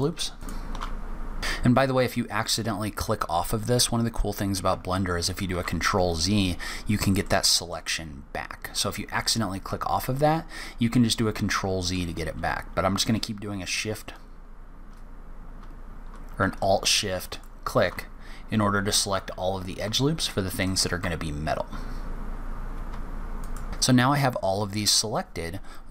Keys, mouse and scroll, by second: 0.2 alt+shift+click, 0.6 scroll down 6, 0.8 alt+shift+click, 1.0 alt+shift+click, 1.2 alt+shift+click, 1.3 middle click, 1.4-1.8 scroll down 4, 1.8 click, 5.3 ctrl+z, 7.0 middle click, 7.8-10.0 scroll up 4, 10.8 scroll down 2, 11.3 middle click, 12.0-12.5 scroll up 2, 17.1 alt+shift+click, 18.0-18.6 scroll down 2, 18.6-19.5 scroll up 2, 20.4 alt+shift+click, 21.0-21.6 scroll down 2, 21.6-21.9 scroll up 3, 22.0 alt+shift+click, 22.2 scroll down 2, 22.3 scroll up 2, 22.6-23.1 scroll down 4, 22.9 alt+shift+click, 23.1 middle click.